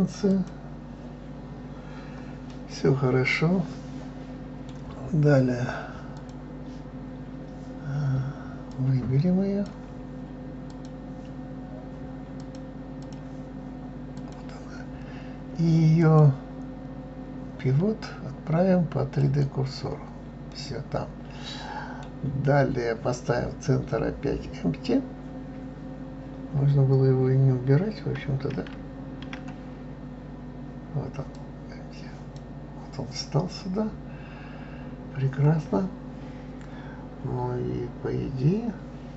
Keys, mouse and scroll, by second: 0.3 click, 2.5-5.0 middle drag, 5.0-5.9 scroll up 4, 6.1 click, 8.7-10.8 drag, 12.4-14.2 drag, 16.0-19.0 drag, 20.5-23.5 middle drag, 28.5 shift+a, 34.0-35.6 scroll down 2, 35.6-37.1 scroll down 1.